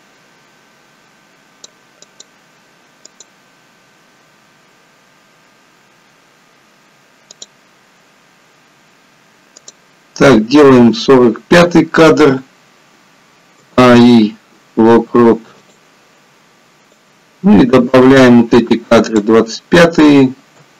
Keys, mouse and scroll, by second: 2.3 click, 3.0 click, 4.3-5.6 scroll up 3, 6.1-7.3 scroll down 3, 7.6 click, 9.9 click, 13.6 a, 13.9 i, 17.1 click, 20.5 a.